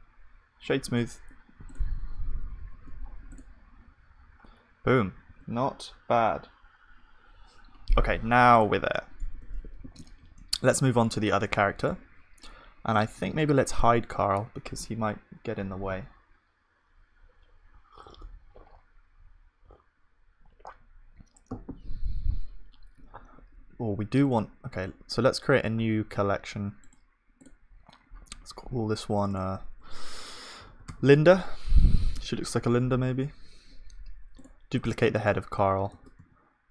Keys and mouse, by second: 0.9 F3, 2.7 ctrl+s, 3.3 click, 3.3-4.3 right drag, 3.8 click, 5.3 ctrl+s, 5.3-31.4 middle drag, 8.5-10.5 drag, 9.8 ctrl+s, 13.1-22.8 drag, 28.1 right click, 32.8-35.0 middle drag, 35.0-36.4 drag, 35.9 shift+d, 36.4 middle click.